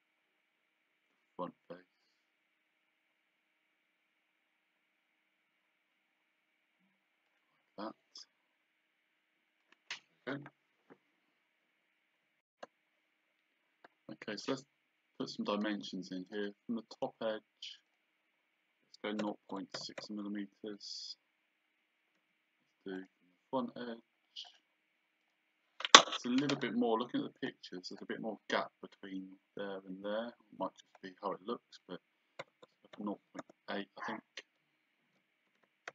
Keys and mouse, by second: 7.3 click, 9.6 click, 16.3 click, 19.2 KP_0, 20.0 Return, 20.0 KP_Enter, 23.0 click, 24.5 click, 27.4 click, 28.0 click, 30.9 click, 32.4 KP_0.